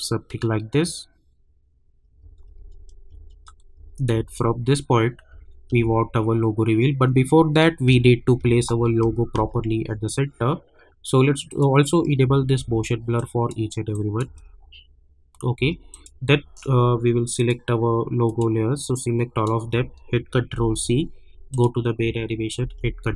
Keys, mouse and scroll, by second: 2.2 space, 11.4 click, 12.2 space, 13.1 click, 14.2 space, 15.9-20.5 drag, 20.5 ctrl+c, 21.5 click, 22.6 ctrl+v.